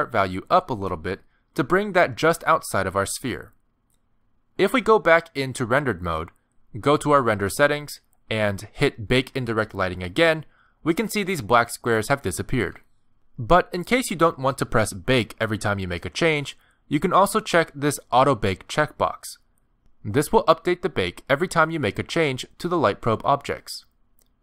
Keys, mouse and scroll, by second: 2.7 middle click, 4.6 middle click, 6.3 z, 7.3-7.6 scroll down 1, 7.8 middle click, 8.7 click, 10.6 click, 11.9 middle click, 14.8-15.3 scroll down 2, 15.3 middle click, 20.2 click, 21.3 middle click, 21.8 g, 23.4 middle click, 24.0 g.